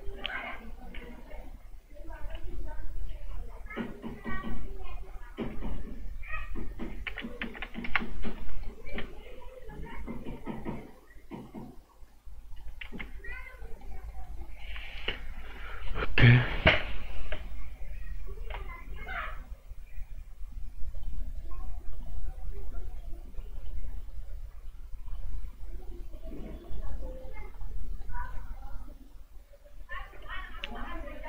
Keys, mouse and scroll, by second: 2.3 s, 4.2 click, 5.5 s, 6.2 click, 7.0 KP_0, 7.1 KP_Decimal, 7.4 KP_0, 7.8 Return, 8.6 right click, 8.9 z, 9.9 click, 12.8 ctrl+z, 13.6 right click, 15.0 alt+right click, 20.9 click, 28.0 right click.